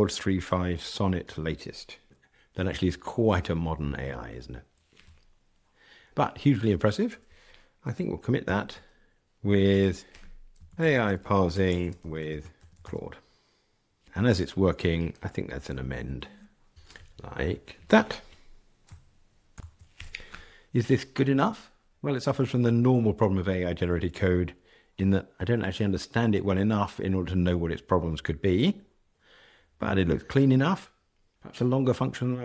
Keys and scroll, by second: 8.4 super+k, 15.1 ctrl+alt+m.